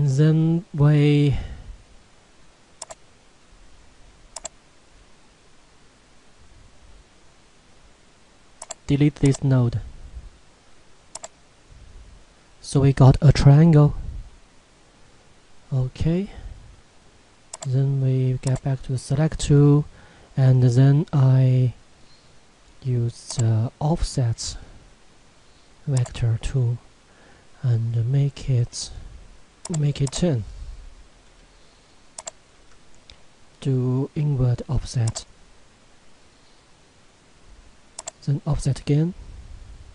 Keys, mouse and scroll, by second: 2.8 click, 8.6 click, 9.2 right click, 11.1 click, 14.1-14.9 scroll down 1, 14.9-17.0 scroll up 1, 17.5 click, 23.3 click, 29.5 z, 29.7 click, 38.0 click.